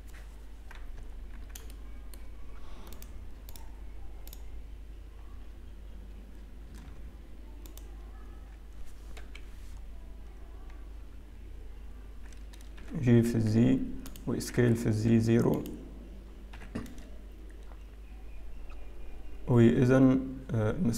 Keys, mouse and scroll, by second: 1.9 Tab, 1.9 shift+middle click, 1.9-2.2 scroll up 2, 2.9 click, 3.5 shift+click, 6.0 shift+click, 7.7 alt+click, 11.3 KP_3, 12.9 g, 14.4 s, 16.9 scroll up 1, 16.9 g.